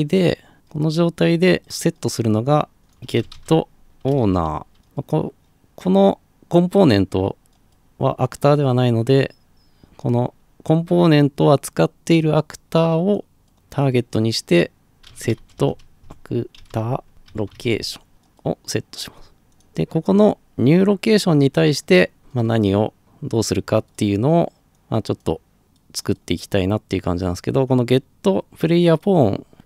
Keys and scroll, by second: 2.9-4.8 typing, 14.9-17.9 typing, 18.1 Return.